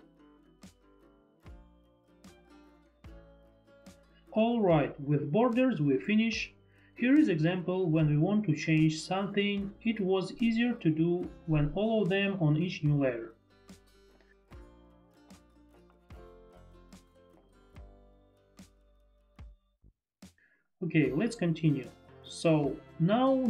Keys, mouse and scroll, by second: 0.1 F3, 0.1 F4, 1.4 shift+F3, 1.4 shift+click, 1.8 shift+click, 3.7 click, 4.1 click, 5.6 click, 6.1 click, 8.5 click, 12.4 click, 13.8 click, 16.5 click, 19.6 Escape, 22.3 ctrl+click.